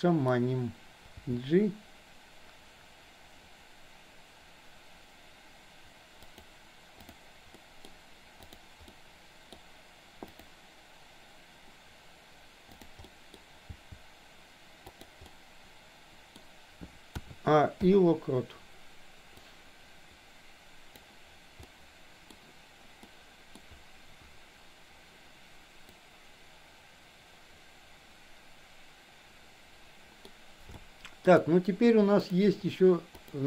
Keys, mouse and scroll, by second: 1.3 g, 7.6 middle click, 8.8-9.6 middle drag, 10.3 click, 12.7 click, 13.2 middle click, 13.7 g, 15.3-16.4 middle drag, 17.3 a, 17.9 i, 19.6-21.2 drag, 21.7-22.3 middle drag, 23.2-23.6 middle drag, 26.1-29.9 drag, 29.9 middle click, 30.9-31.2 shift+middle drag, 33.1 click.